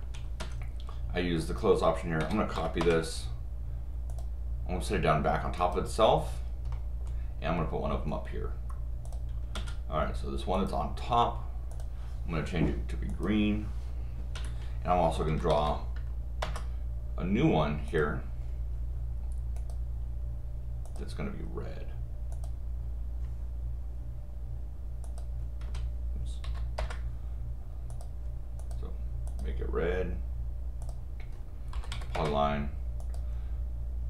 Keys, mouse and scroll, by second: 0.4 Escape, 1.4 click, 2.8 Return, 4.1 click, 5.6 click, 6.7 middle click, 9.1-10.7 drag, 9.5 Escape, 11.7 click, 13.1 click, 14.3 Escape, 15.3 p, 16.5 Return, 17.9 click, 19.6 click, 20.8 click, 22.3 click, 25.0 click, 25.6 Escape, 26.4 u, 27.9 click, 28.6 click, 29.3 click, 30.8 click, 32.1 Return, 33.0 click.